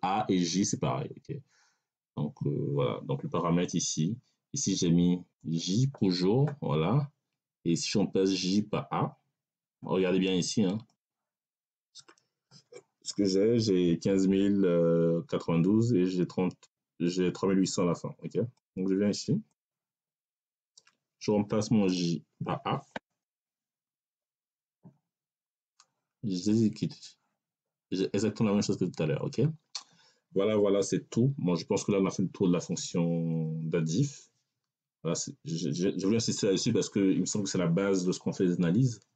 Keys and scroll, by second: 23.1 BackSpace, 23.7 a.